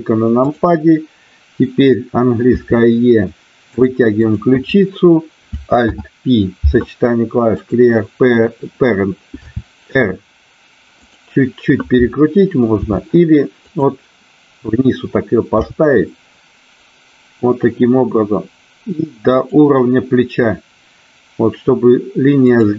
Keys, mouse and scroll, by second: 2.5 e, 3.8 click, 4.2 click, 5.9 alt+p, 9.5 r, 12.9 r, 13.5 click, 15.5 g, 19.3 click, 22.4 click.